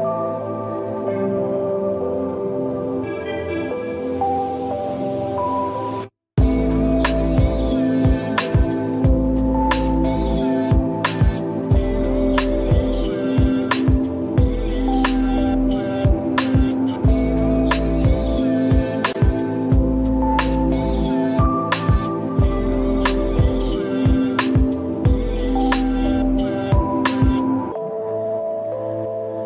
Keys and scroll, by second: 29.1 ctrl+-.